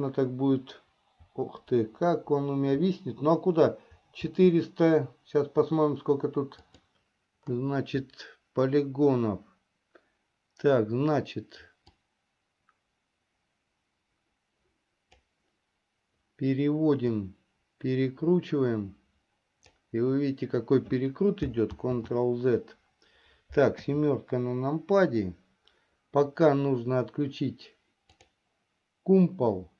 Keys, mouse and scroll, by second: 12.1-15.8 drag, 17.8-20.9 drag, 22.9 ctrl+z, 24.5 KP_7.